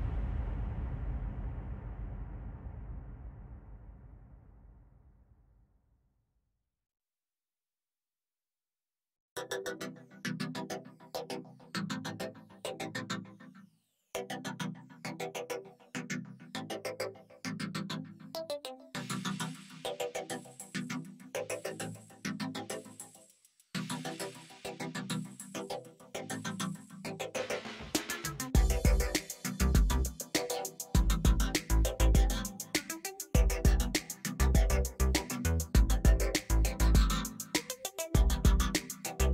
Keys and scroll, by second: 2.4 ctrl+space, 3.5 ctrl+t, 10.5 ctrl+alt+z, 13.4 space, 25.2 space, 26.3 alt+space, 29.9 space, 33.2 F9, 34.1 space.